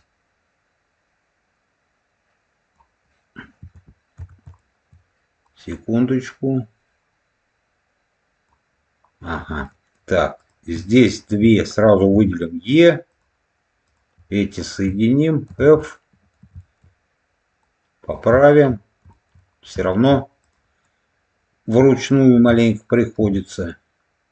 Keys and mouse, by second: 4.5 shift+middle click, 5.4-8.4 drag, 9.5 middle click, 10.3 click, 11.0 shift+click, 12.0 e, 13.0 click, 13.8 click, 14.5 shift+click, 15.4 f, 15.7 middle click, 16.5 shift+middle click, 17.5 click, 18.3 shift+middle click, 19.0 shift+middle click, 19.8 shift+middle click, 20.3 click, 22.0 ctrl+click, 23.1 e.